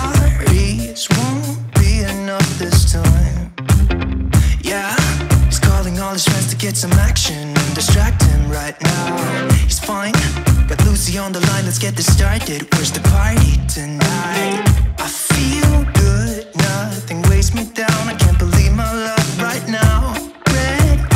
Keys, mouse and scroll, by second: 13.6-14.0 scroll down 1, 15.4-19.1 drag.